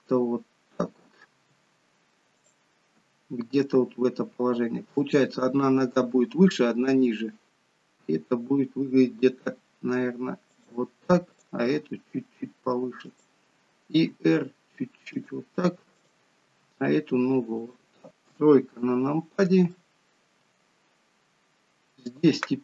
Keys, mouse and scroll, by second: 1.5 r, 3.0 g, 8.1 g, 11.4 click, 11.9 g, 14.1 r, 16.1 click, 16.6 r, 18.4 KP_3, 19.8 shift+middle click, 22.1 click.